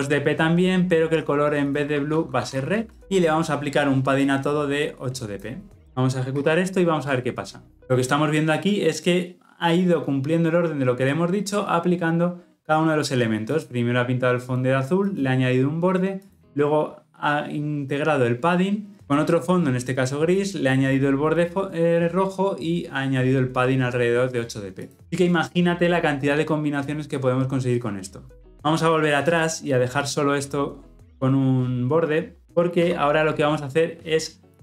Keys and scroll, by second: 5.8 ctrl+alt+o.